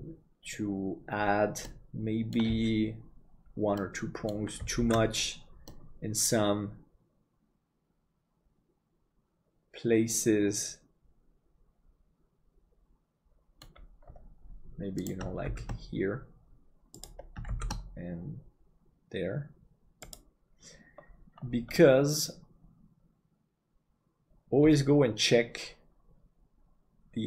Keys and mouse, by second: 1.8 middle click, 3.9 middle click, 5.0 ctrl+s, 5.7-13.8 middle drag, 15.5 shift+d, 21.9-27.2 middle drag.